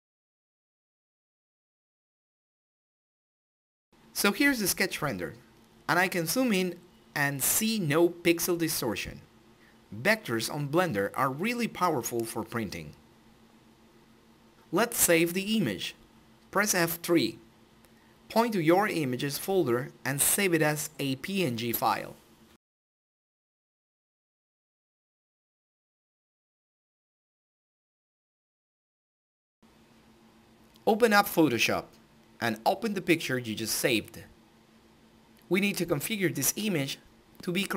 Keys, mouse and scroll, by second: 4.7-5.7 drag, 5.9 scroll down 1, 6.2-6.6 scroll up 1, 6.8 scroll down 1, 7.1 scroll up 1, 7.8 scroll down 1, 8.0-9.6 middle drag, 9.6 scroll down 1, 10.3-12.4 middle drag, 12.4 Home, 13.9 click, 15.4 click, 19.2 typing, 19.6 Return, 20.3 click, 22.0-23.5 typing, 24.4 click, 33.6 click.